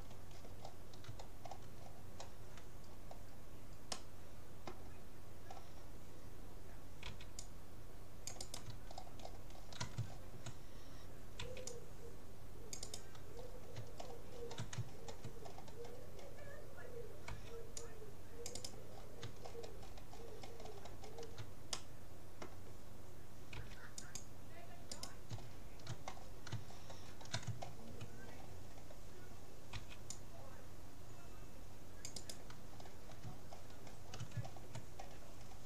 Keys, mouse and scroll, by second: 1.4-2.9 scroll down 2, 2.9-7.5 middle drag, 7.0 c, 8.9-12.1 middle drag, 11.4 c, 13.5 middle click, 14.1-14.5 scroll down 1, 17.3 c, 17.3 middle click, 18.9-19.5 scroll up 1, 19.5-23.5 middle drag, 23.7 c, 25.1-26.7 right drag, 26.7-29.3 middle drag, 29.3-30.5 drag, 29.7 c, 32.7 middle click, 33.5-34.7 scroll up 1, 34.7 scroll down 1, 34.9-35.6 middle drag.